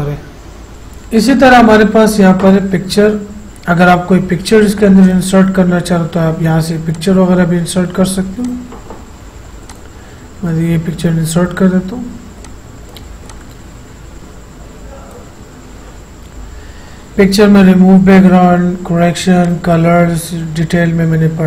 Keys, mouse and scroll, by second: 0.7 click, 5.2 click, 12.6-19.6 drag.